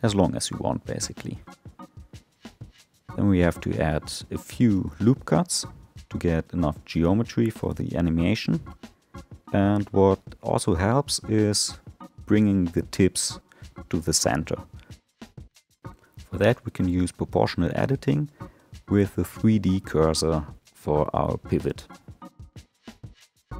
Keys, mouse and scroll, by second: 2.0 ctrl+r, 7.9 middle click, 8.9-10.3 scroll up 2, 10.3 click, 11.6 3, 12.4 click, 14.0-14.8 scroll down 2, 14.8 alt+middle click, 15.4 alt+middle click, 17.7 click, 18.1-21.3 drag.